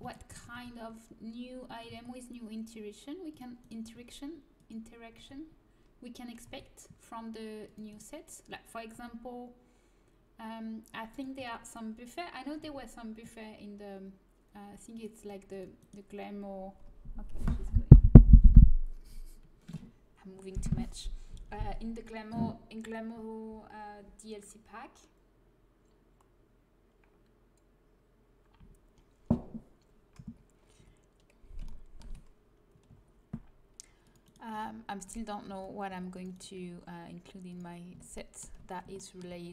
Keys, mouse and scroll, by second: 0.5 a, 1.8 c, 3.9 g, 5.1 a, 6.4 c, 8.9 g, 11.5 a, 12.6 c, 30.7 a, 32.8 c, 33.9-34.9 drag, 34.4 g, 35.4 a, 35.6 click, 35.8 c, 36.0 click, 36.5 g, 37.8 click, 38.1 click.